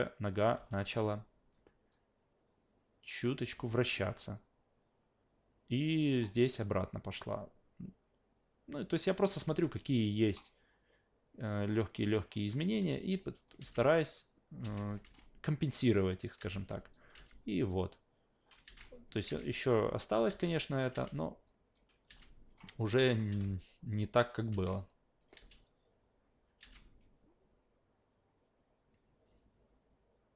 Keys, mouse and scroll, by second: 0.5 e, 1.9 click, 3.5 s, 4.3-6.2 drag, 7.3 click, 9.4 ctrl+z, 10.3 click, 13.4 click, 14.6 alt+v, 14.8 click, 15.0 alt+v, 16.4 alt+v, 16.6 click, 16.9 alt+click, 17.1 alt+v, 18.6 alt+v, 19.1 click, 19.3 alt+v, 19.7-20.1 alt+drag, 20.3 alt+v, 20.8 click, 21.5 alt+click, 22.1 alt+v, 22.5 click, 22.8-23.1 alt+drag, 23.3 alt+v, 23.8 alt+click, 24.5 alt+v, 25.2 click, 26.6 alt+v, 27.0-30.3 drag.